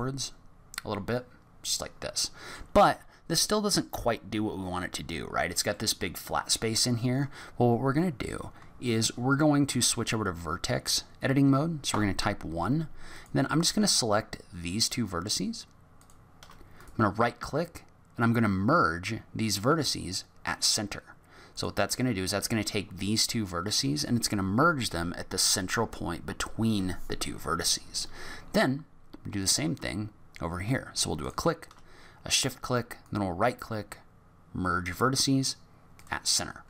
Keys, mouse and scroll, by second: 0.0 middle click, 5.7 middle click, 11.9 1, 13.1 click, 16.0 shift+click, 16.7 right click, 29.4 click, 31.2 shift+click, 33.0 right click.